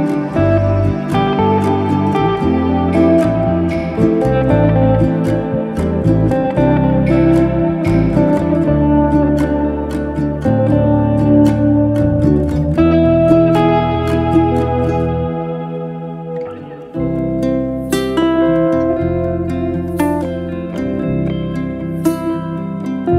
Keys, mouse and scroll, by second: 1.1-2.5 scroll down 2, 2.5 click, 3.1 g, 4.5 scroll down 1, 4.8-6.3 middle drag, 7.4 scroll up 2, 7.6 Tab, 9.4 click, 10.6 click, 12.7-14.2 middle drag, 14.2 Tab, 14.7-15.1 scroll up 1, 15.1 shift+middle click, 15.6 click, 16.3 g, 17.8 click, 18.7 g.